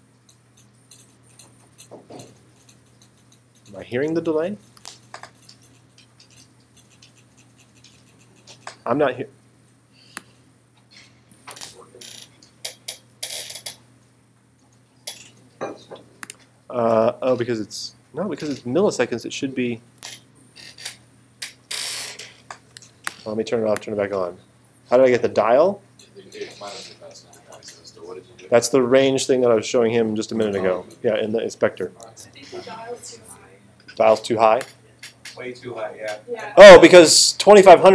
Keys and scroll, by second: 4.8 space, 11.6 space, 20.0 space.